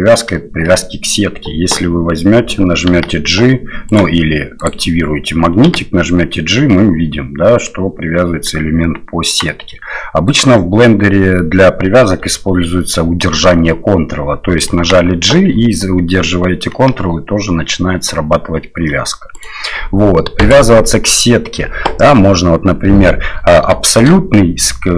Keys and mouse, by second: 0.6-1.1 shift+middle drag, 2.9 g, 4.6 click, 5.7 g, 10.3 click, 14.8 g, 20.4-22.0 drag, 23.8 shift+click.